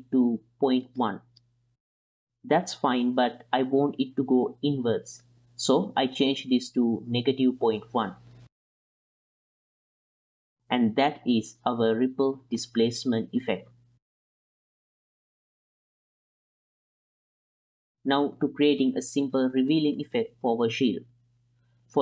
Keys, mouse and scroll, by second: 1.7 space, 2.3 ctrl+drag, 2.8-3.2 drag, 3.2-4.7 middle drag, 5.6-8.6 drag, 9.1 space, 13.4-13.9 ctrl+middle drag, 14.2 click, 14.5 click, 14.6 click, 15.4 click, 15.7 shift+p, 15.9 F2, 16.3 shift+p, 17.1 n, 17.5 click.